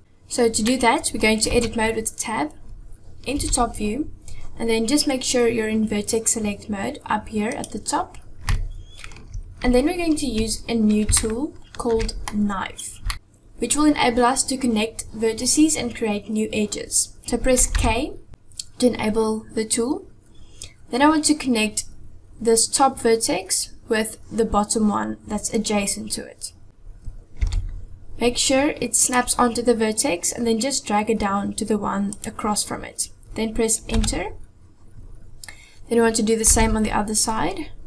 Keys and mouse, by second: 0.7-1.3 middle drag, 1.6 Tab, 3.4 KP_7, 7.5 click, 8.5 middle click, 10.3 KP_7, 11.2-12.3 shift+middle drag, 17.8 k, 27.5 k, 36.5 k.